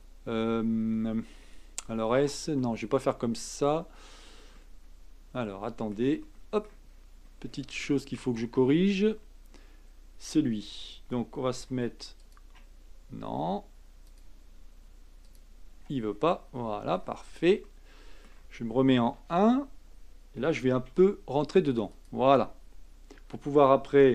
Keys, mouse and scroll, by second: 3.3-4.1 scroll up 4, 4.1-4.6 scroll down 3, 4.6-6.9 middle drag, 6.9-7.8 scroll up 8, 7.8 shift+middle click, 8.3-11.5 scroll up 1, 11.6 a, 12.2 click, 14.0 alt+click, 15.2 alt+click, 16.1-17.6 scroll down 16, 17.6-19.1 middle drag, 19.1 KP_1, 20.8 g.